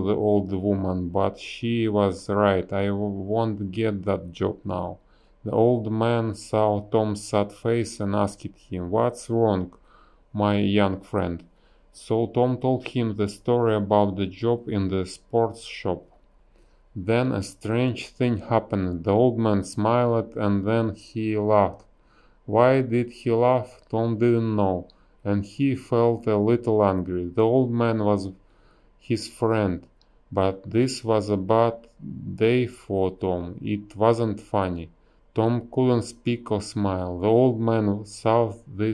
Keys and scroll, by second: 2.3 ctrl+z, 7.6 a, 8.3 BackSpace, 10.1 shift+e, 11.5 a, 12.7 space, 14.9 space, 16.2 space, 17.1 b, 21.2 space, 23.0 space, 23.3 a, 24.7 space, 29.8 space, 30.7 b, 31.0 space.